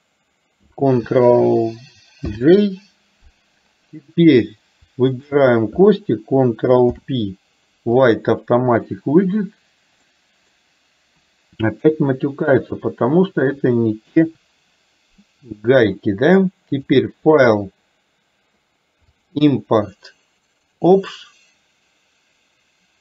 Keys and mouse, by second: 2.3 ctrl+j, 5.2 shift+click, 6.9 ctrl+p, 10.2-10.6 middle drag, 11.8 KP_4, 12.7 click, 14.2 Delete, 17.1-21.2 drag.